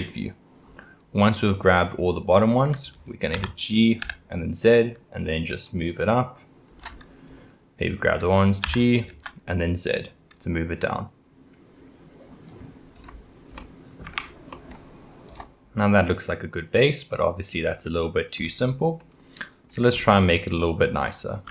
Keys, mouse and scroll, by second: 1.0 click, 3.4 g, 7.3 click, 8.6 g, 13.6 middle click, 14.1 Tab, 14.5-15.3 middle drag, 15.3-15.8 drag, 15.8-18.3 middle drag, 18.3-19.0 scroll down 3, 19.0-19.9 middle drag, 19.9-20.5 scroll up 4, 20.5-21.5 middle drag.